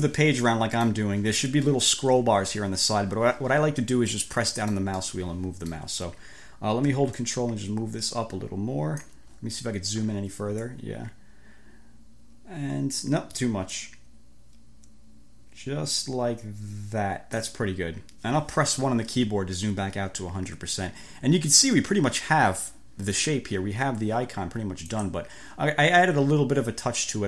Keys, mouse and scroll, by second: 4.1-5.1 drag, 5.3 click, 7.3-9.3 ctrl+drag, 9.5-10.3 scroll up 5, 10.7 ctrl+click, 13.9 click, 18.9 1, 24.9 click.